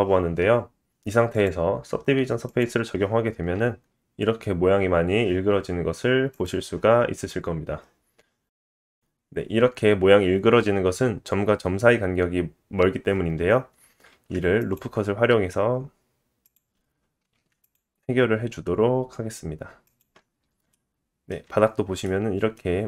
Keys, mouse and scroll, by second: 0.6 alt+z, 1.3-7.7 drag, 7.7-8.8 middle drag, 8.1 Tab, 8.8 click, 8.9-22.8 middle drag, 14.1 ctrl+r, 17.3 ctrl+r, 21.5-22.0 scroll up 3, 21.5 Tab.